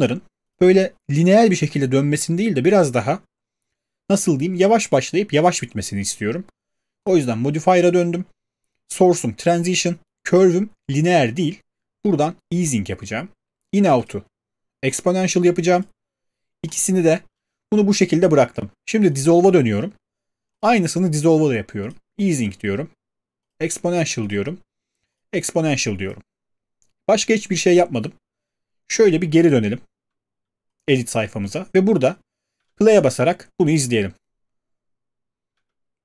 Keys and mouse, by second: 7.1 click, 11.2 click, 12.8 click, 14.1 click, 15.0 click, 15.9 click, 16.8 click, 19.2 click, 20.6 click, 21.9 click, 22.5 click, 23.5 click, 24.3 click, 25.2 click, 26.1 click, 29.1 click, 31.2 click, 35.5 middle click, 35.5 space.